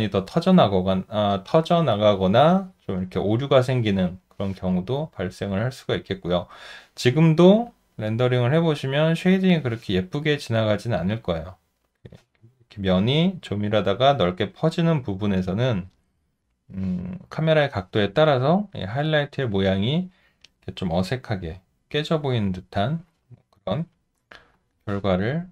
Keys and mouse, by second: 4.9 alt+middle click, 5.5 alt+click, 6.3 alt+right click, 10.9 alt+right click, 25.3 alt+right click.